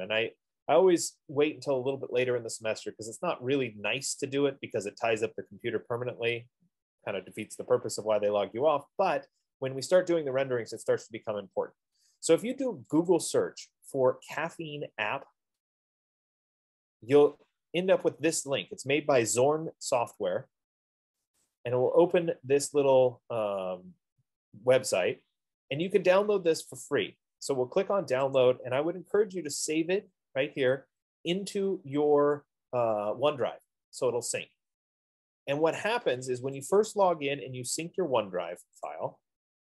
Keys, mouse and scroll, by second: 15.0-19.9 drag, 21.8-25.5 drag, 25.6 scroll, 28.9 click, 31.2-34.0 drag, 37.3-39.3 drag.